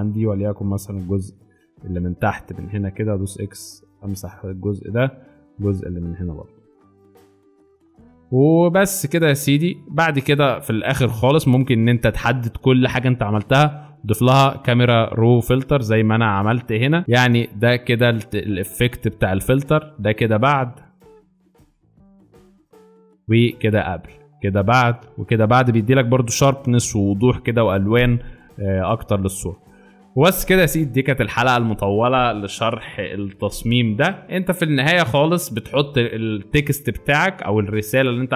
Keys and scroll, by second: 0.7-1.4 typing, 2.7 x, 7.4 alt+space, 19.7 space, 20.8 alt+space, 21.7 alt+space, 34.2 space.